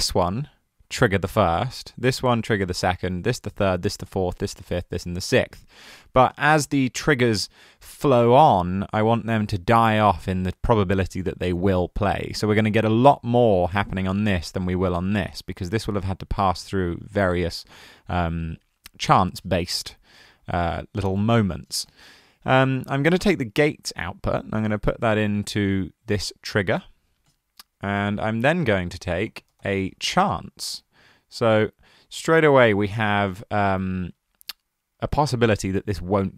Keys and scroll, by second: 28.6 super+a, 29.0-30.3 typing.